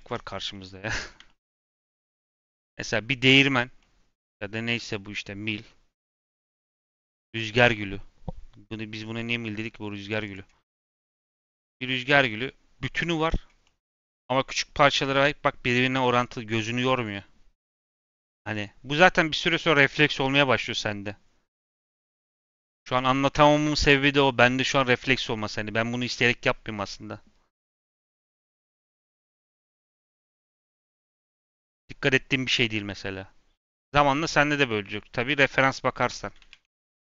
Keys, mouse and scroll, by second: 0.0 Tab, 0.3 scroll down 1, 0.5-1.0 middle drag, 1.0 click, 1.2-1.8 shift+middle drag, 1.8-2.1 scroll up 2, 2.1-5.2 middle drag, 5.2-5.6 scroll up 1, 5.6-37.2 middle drag.